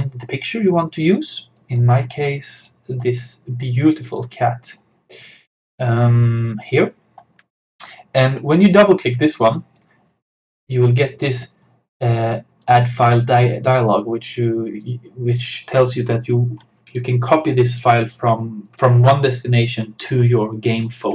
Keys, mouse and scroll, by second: 1.6 click, 6.6 click, 9.1-15.6 drag.